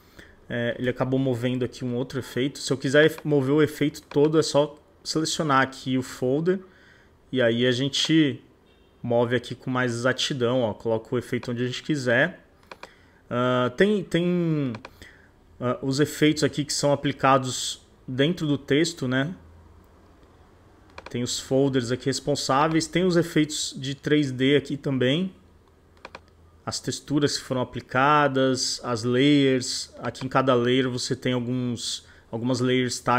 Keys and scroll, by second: 1.5 super+z.